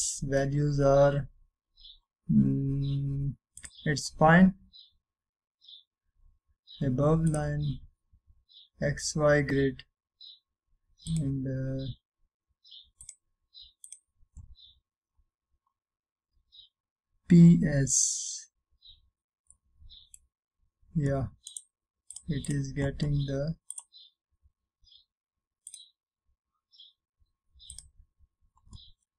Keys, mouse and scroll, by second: 4.7 click, 8.4 click, 12.2 click, 16.3 scroll up 1, 16.8 scroll down 1, 19.7-20.6 scroll down 1, 20.6-21.5 middle drag, 22.6 right click, 23.2 click.